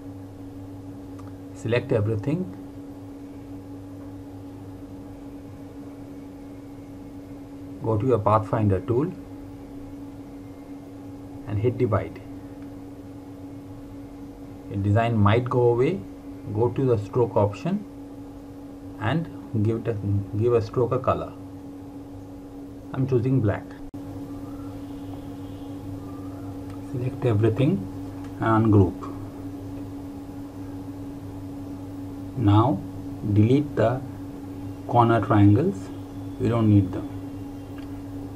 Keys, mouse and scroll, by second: 10.7 click, 14.7 click, 17.1 click, 21.7 click, 30.0 right click, 31.2 click, 32.4 right click, 33.7 click, 37.5 Delete.